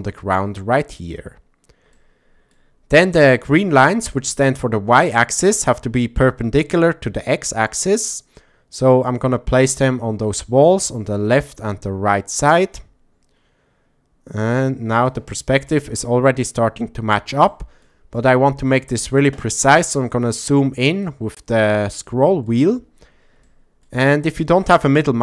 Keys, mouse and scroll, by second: 1.9-2.5 shift+middle drag, 5.2-6.8 drag, 8.0-9.7 drag, 10.4-11.5 drag, 12.5-15.1 drag, 17.5-17.8 shift+middle drag, 18.7-19.1 shift+middle drag, 20.2 click, 21.7 shift+middle click, 23.4 shift+middle click.